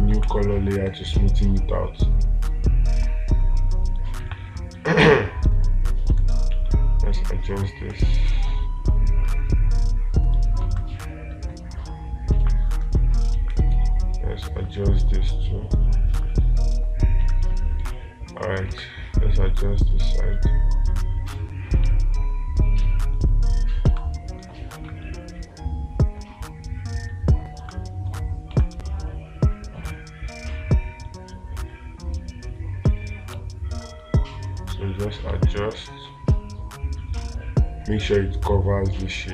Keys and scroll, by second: 0.7 space, 3.3 ctrl+z, 4.7 space, 8.3 space, 11.2 space, 16.6 space, 18.3 space, 24.4 space, 28.1 space.